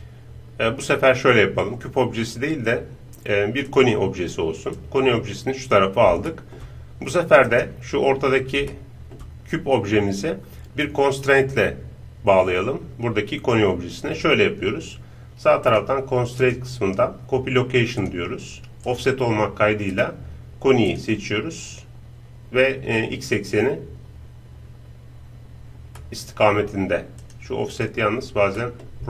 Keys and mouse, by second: 4.7-7.4 drag, 6.3-10.4 middle drag, 6.3 right click, 7.4-9.8 right drag, 15.7-18.3 drag, 18.9-26.0 drag, 26.0-29.0 middle drag, 27.2-29.0 drag, 28.6 right click.